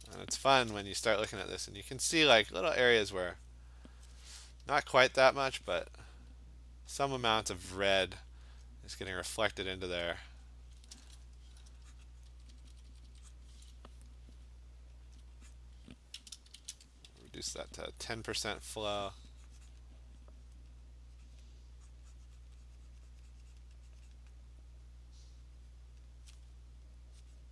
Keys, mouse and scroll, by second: 0.4 [, 0.8 [, 1.0 [, 1.3 [, 2.5 [, 3.5 click, 7.1 alt+click, 8.4 click, 9.8 click, 10.8 click, 10.9 Return, 10.9 alt+click, 12.0 click, 12.2 click, 12.3 click, 12.3-13.1 typing, 13.3 click, 15.2 alt+click, 15.4 alt+click, 15.6 click, 16.6 !, 17.2 [, 17.4 [, 17.6 [, 18.2 click, 19.2 click, 19.7 click, 20.0 alt+click, 20.6 click, 21.4 click, 21.9 click, 22.5 click, 23.6 click, 24.2 click, 26.0 click, 27.4 click.